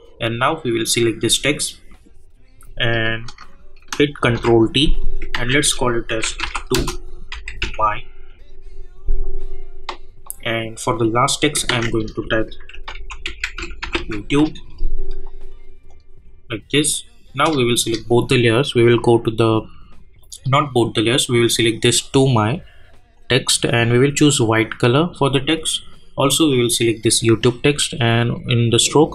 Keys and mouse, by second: 3.1 click, 4.4 ctrl+t, 5.0 click, 5.3 ctrl+a, 6.0-7.6 typing, 9.3 click, 11.6 ctrl+a, 12.4-14.4 typing, 15.9 click, 17.7 shift+click, 26.5 click.